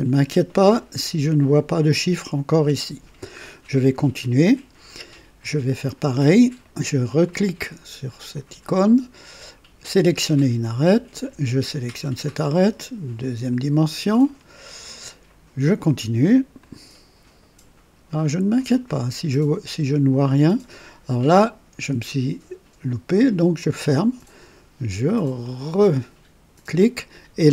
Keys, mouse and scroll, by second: 7.2 click, 9.8 click, 11.8 click, 13.1 click, 14.2 right click, 16.5 click, 18.5 click, 23.5 click, 25.4 click.